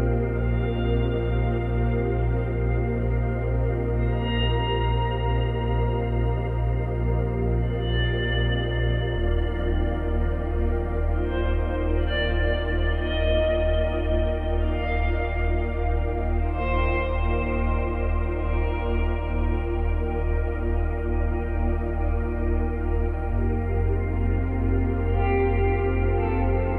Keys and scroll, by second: 4.2 space, 8.2 space, 9.4 Delete, 10.3 space, 13.1 space, 22.1 space, 24.4 space, 25.6 Delete.